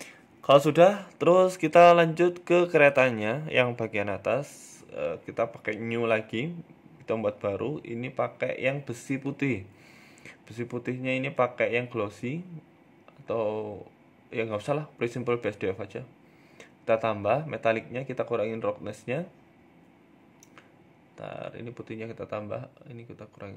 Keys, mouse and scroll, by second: 0.1 shift+middle click, 0.1 scroll down 1, 0.3 Tab, 0.9 middle click, 3.9 click, 4.9 click, 10.2 click, 13.3 ctrl+z, 13.9-15.0 scroll down 2, 15.0 click, 15.0 scroll down 1, 17.2 click, 20.3 click, 21.9 click.